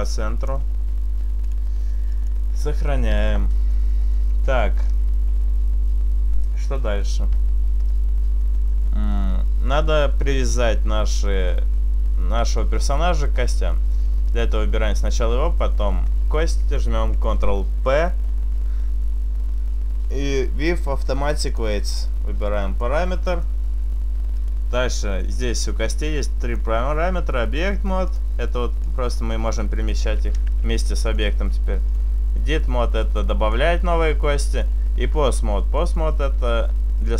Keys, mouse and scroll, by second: 0.2 click, 1.5 click, 3.8 middle click, 4.7-5.1 scroll up 4, 5.1-6.7 scroll down 1, 8.5-12.0 scroll down 3, 12.4 right click, 15.7 shift+right click, 17.0 ctrl+p, 22.9 right click, 23.4 right click, 24.4 click, 26.5 click, 28.9 click, 30.6 ctrl+z, 31.5 click, 33.1 click, 33.8 ctrl+z, 34.6 click, 35.9 click, 36.2 click.